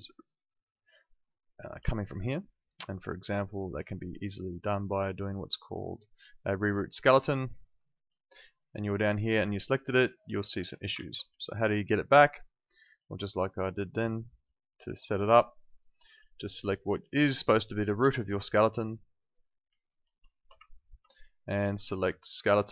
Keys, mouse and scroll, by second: 0.7 alt+click, 3.7 click, 6.7 click, 7.3 alt+click, 7.6 alt+right click, 7.8 alt+click, 11.4 alt+click, 12.4 alt+click, 14.6 alt+right click, 16.5 click, 18.2 alt+right click, 19.7 alt+click, 20.7 ctrl+click.